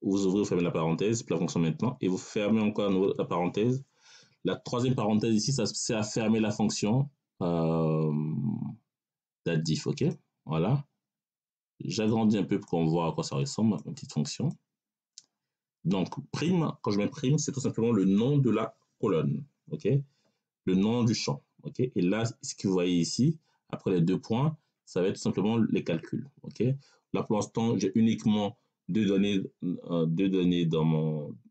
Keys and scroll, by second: 0.5 [, 2.9 [.